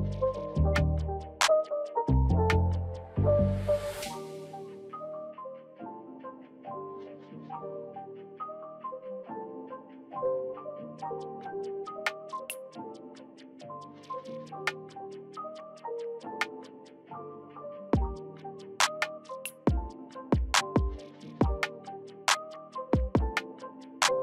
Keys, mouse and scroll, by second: 6.8-11.2 drag, 14.2 click, 19.8 right click, 20.9 click.